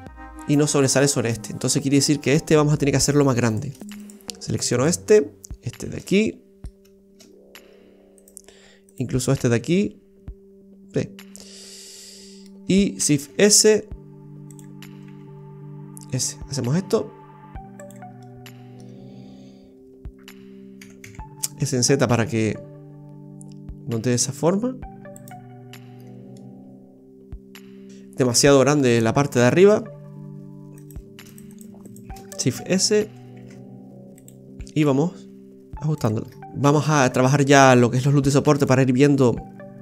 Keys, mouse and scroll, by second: 1.3-2.4 scroll up 9, 2.5 middle click, 3.4 right click, 3.8 alt+shift+right click, 4.0 alt+shift+right click, 4.7 alt+shift+right click, 6.1 middle click, 6.6 scroll up 1, 7.3 scroll down 2, 8.1 alt+shift+right click, 8.8 alt+shift+right click, 9.5 middle click, 13.2 shift+s, 15.1 s, 18.3 middle click, 21.0 s, 26.0 scroll down 2, 26.4 middle click, 28.7-29.5 scroll up 8, 29.9 Tab, 30.8 right click, 31.3 alt+shift+right click, 31.5 right click, 31.8 alt+shift+right click, 32.5 shift+s, 33.3 shift+s, 34.6 s, 36.2 scroll down 3, 36.9 scroll up 2, 38.2 ctrl+r.